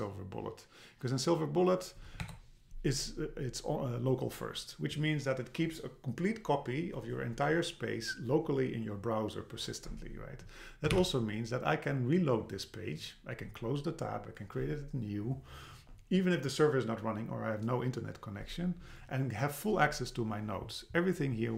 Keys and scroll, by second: 2.2 Return, 11.0 super+r.